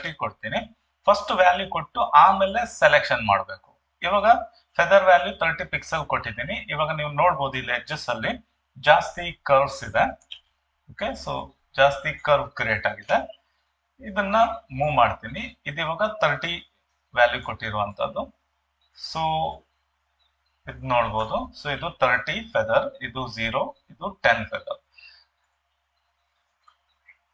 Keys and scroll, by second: 10.3 ctrl+2, 13.0 Escape.